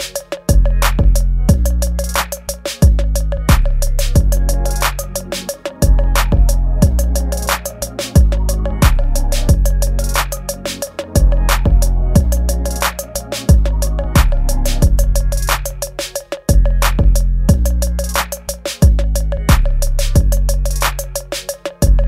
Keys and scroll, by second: 3.7 Tab, 6.0 space, 7.3 space, 10.1 ctrl+z, 10.4 space, 11.3 ctrl+0, 13.7 ctrl+0, 15.3 space, 15.8 space, 17.0 space, 17.7 ctrl+c.